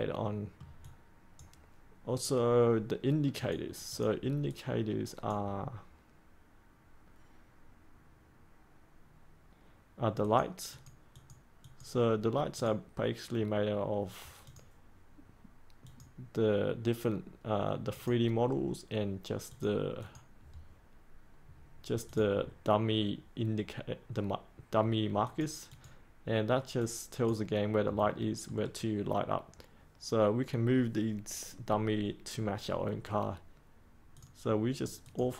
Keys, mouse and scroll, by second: 0.8-10.6 drag, 16.1 click, 21.4-22.0 scroll up 1, 22.0 click, 22.3-25.2 scroll up 1, 25.2 click, 28.0 middle click, 34.1 click.